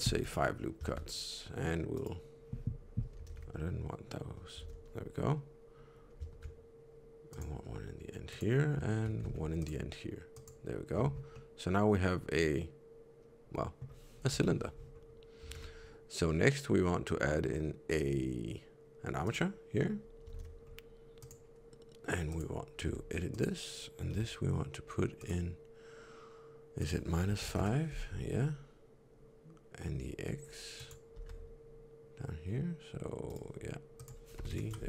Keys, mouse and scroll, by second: 0.8 shift+r, 1.9 right click, 3.2 ctrl+z, 4.5 alt+a, 6.2 ctrl+r, 9.2 ctrl+r, 10.9 Tab, 11.3 middle click, 14.2 KP_3, 14.8 scroll up 1, 15.4 shift+a, 20.2 alt+z, 20.6-21.0 scroll up 1, 21.1 click, 21.1 scroll up 1, 22.2 click, 22.8 Tab, 23.2 click, 24.0 n, 25.1 click, 26.7 click, 30.7 click, 31.1 g, 33.9 click.